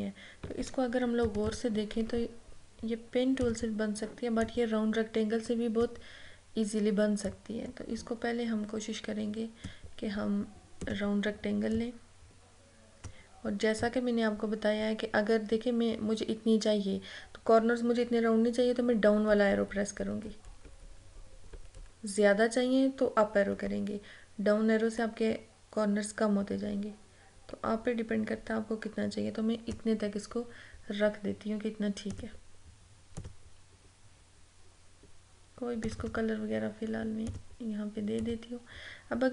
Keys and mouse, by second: 1.3 ctrl+=, 3.5 click, 4.9-18.6 drag, 18.6 Down, 32.2 click, 35.9 click, 36.0 click.